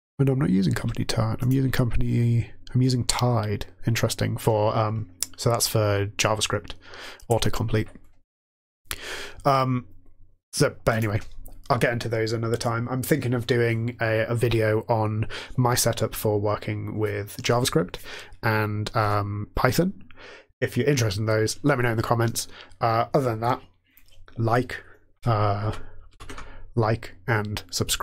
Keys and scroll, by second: 0.8 Tab, 25.7 shift+Page_Down, 26.1 shift+Page_Up.